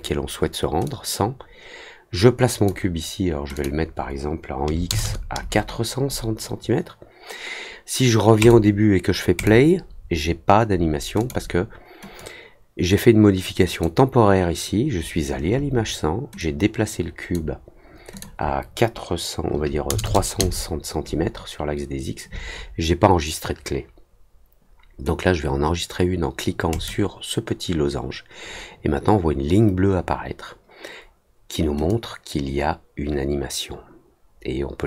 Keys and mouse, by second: 0.8-2.6 drag, 3.5 click, 8.3 click, 9.3 click, 11.1 click, 12.1-13.8 drag, 16.3 click, 18.1 click, 26.7 click, 31.8-34.8 drag.